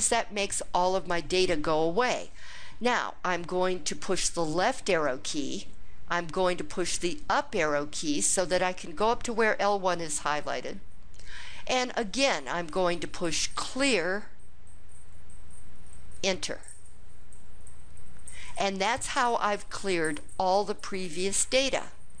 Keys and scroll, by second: 4.7 Left, 7.2 Up, 15.9 Return.